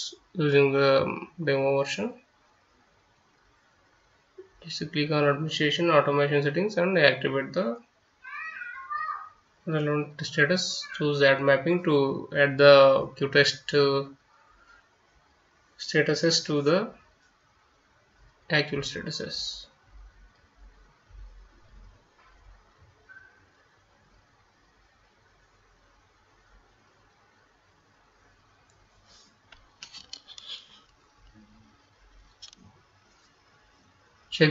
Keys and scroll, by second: 0.0-3.9 typing, 4.3 Return, 5.8 F9, 6.6-15.1 typing, 16.1-18.8 typing, 20.5 F9.